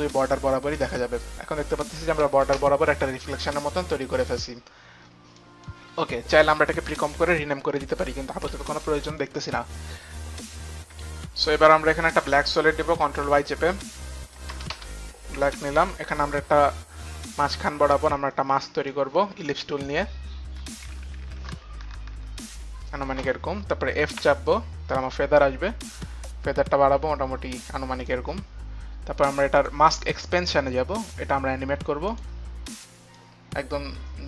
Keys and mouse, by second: 0.9 click, 1.9 click, 2.5 space, 5.4 click, 8.4 click, 9.0 click, 11.3 click, 11.7 click, 12.2 click, 12.2 y, 14.0 click, 14.7 Return, 15.5 click, 16.4 Return, 17.2 click, 18.6 click, 20.9 shift+click, 24.1 f, 25.9 click, 25.9 f, 28.4 click, 29.5 click, 30.0 click, 33.2 click.